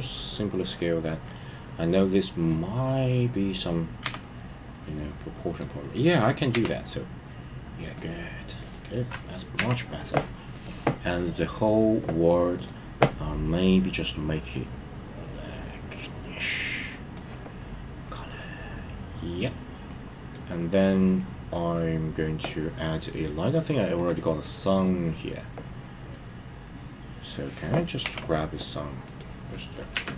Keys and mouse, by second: 2.7-3.3 drag, 4.0 s, 5.5 click, 6.9 g, 7.8 click, 8.7 click, 9.5 KP_1, 11.5 click, 12.5 click, 18.3-19.4 middle drag, 19.8-20.3 middle drag, 21.1-21.5 middle drag, 26.1-27.3 middle drag, 28.3 g, 29.1 click, 29.9 KP_1.